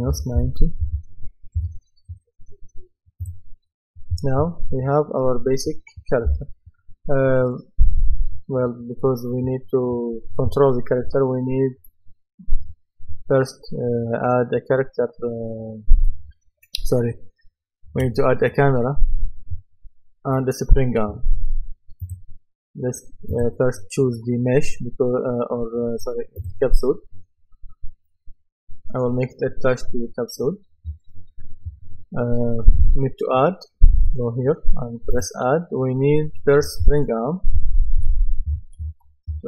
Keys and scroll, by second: 0.1 KP_Subtract, 0.4 KP_9, 1.6 Return, 37.3-39.4 typing.